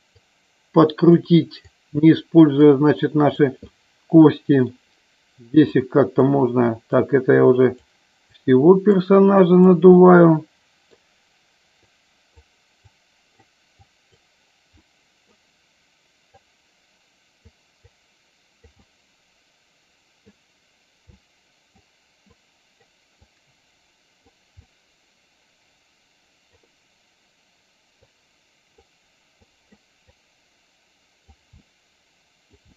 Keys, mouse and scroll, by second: 0.2 click, 1.8 click, 2.8 click, 3.7 middle click, 5.8 click, 7.0 click, 8.5 click, 9.4 click, 10.0 middle click, 12.0 click, 12.9 click, 13.9 click, 14.8 middle click, 16.4-17.5 drag, 17.9 click, 18.9-20.4 middle drag, 21.3 middle click, 22.5 click, 23.3-24.4 drag, 24.7-26.6 middle drag, 28.2 click, 29.6 click, 30.3-31.4 drag, 31.7 middle click.